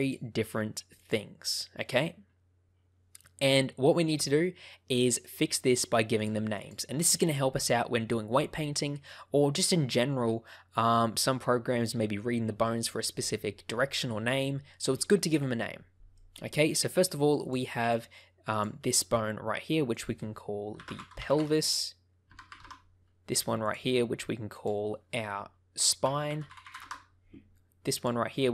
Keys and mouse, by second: 0.0 click, 0.9 click, 6.1 click, 6.4 click, 16.1 middle click, 17.3 click, 17.7 middle click, 18.4 click, 18.8 middle click, 19.9-22.9 drag, 22.3 BackSpace, 24.5-27.2 drag, 27.8 click.